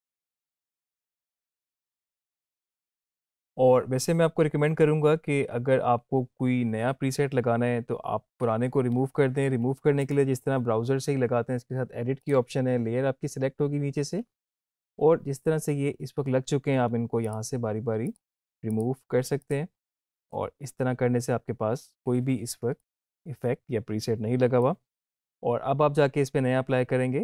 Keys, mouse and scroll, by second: 10.0 click, 17.2 click, 22.7-24.6 drag.